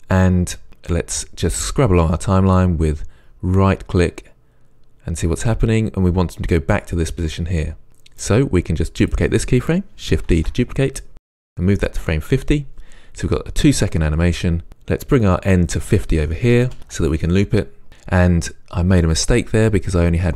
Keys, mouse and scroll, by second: 1.6-3.3 right drag, 4.2 right click, 4.8 right click, 7.0-7.4 right drag, 8.2-9.0 right drag, 9.0 click, 10.3 shift+d, 11.6 click, 15.4 click, 16.8 Return, 17.9 space.